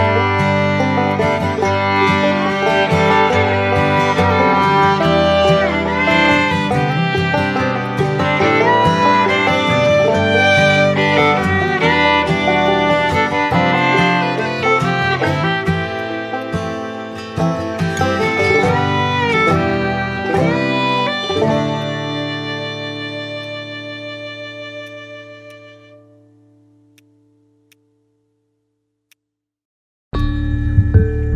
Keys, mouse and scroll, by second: 24.2 ctrl+z, 28.2 x.